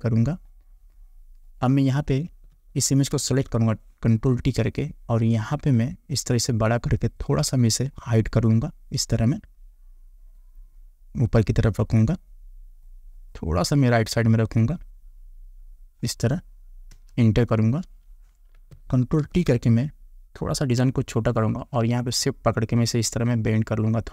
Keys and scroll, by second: 3.2 ctrl+t, 17.0 Return, 19.3 ctrl+t.